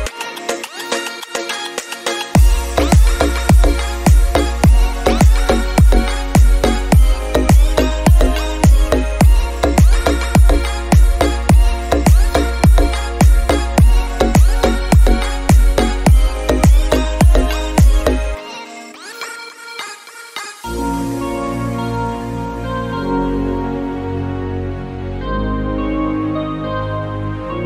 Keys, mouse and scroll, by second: 1.6 KP_7, 2.4-5.1 drag, 5.7 shift+click, 6.2 shift+click, 6.8 m, 9.8-10.9 drag, 11.0 click, 12.0 click, 12.3-12.9 scroll down 2, 12.9-14.7 drag, 14.7 g, 23.9 click, 26.7 click, 27.2 click.